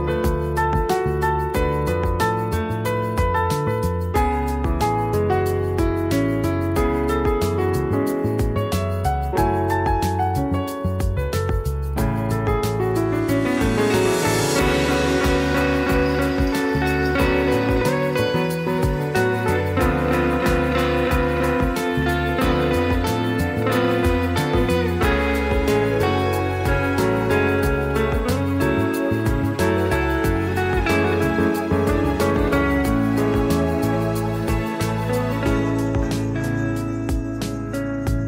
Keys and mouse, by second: 1.7 click, 2.1-3.0 middle drag, 3.3 s, 3.8 middle click, 4.7-5.1 drag, 5.3 click, 5.7-6.6 middle drag, 6.8 shift+a, 7.8 drag, 8.3 click, 8.8 shift+middle click, 9.1 r, 10.2 s, 10.6 right click, 11.6 click, 12.0 middle drag, 12.3 s, 12.9 click, 13.5 click, 14.1 click, 14.7 s, 15.5 click, 16.2 click, 16.7 click, 17.6 r, 19.0 g, 20.1-21.1 drag, 21.2 middle drag, 21.8 alt+z, 22.0 shift+middle click, 22.4 click, 22.6 shift+middle drag, 22.8 middle click, 23.4 alt+z, 23.5 middle drag, 24.5 shift+middle drag, 25.5 click, 26.3 s, 27.2 s, 28.7 click, 29.2 middle click, 29.7 shift+click, 31.0 middle drag, 32.2 ctrl+KP_Subtract, 32.6-32.9 middle drag, 33.0 middle drag, 33.4 click, 33.9 s, 35.7-36.2 middle drag, 36.3 click, 36.5 click, 37.1 middle click, 37.8 click.